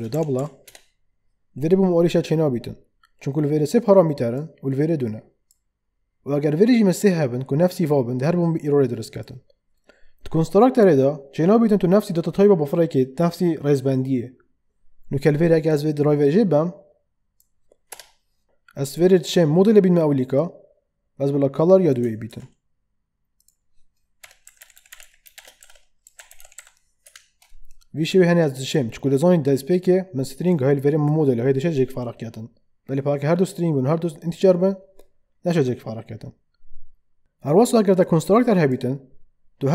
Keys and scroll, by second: 0.0-0.6 typing, 0.6 Return, 17.9 BackSpace, 22.3 ctrl+x, 24.0-27.0 typing.